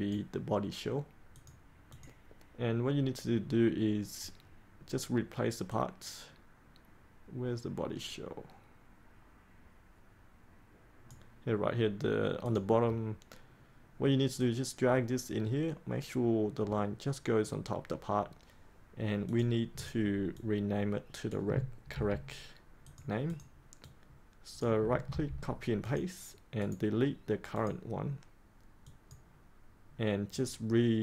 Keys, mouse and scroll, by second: 5.6-13.5 drag, 14.5-21.5 drag, 21.8 ctrl+c, 22.8 click, 25.1 ctrl+v, 25.8 click, 26.6 right click, 27.5 click.